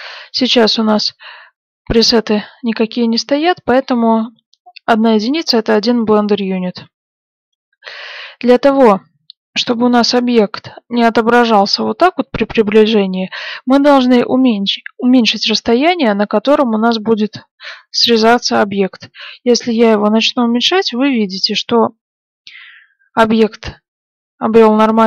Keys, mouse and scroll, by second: 12.1-14.0 middle drag, 16.5 click.